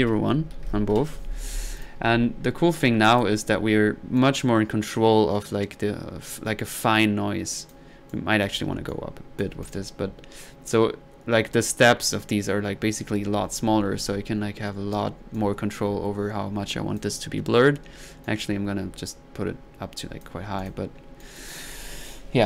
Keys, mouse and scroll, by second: 1.8-2.4 drag, 2.0 1, 2.7 middle click, 3.1 click, 4.2-7.8 drag, 8.1 click, 8.6 click, 8.9 click, 10.7-15.0 drag, 15.3-17.1 drag, 18.2-20.3 drag, 20.6 drag, 21.2-21.7 drag.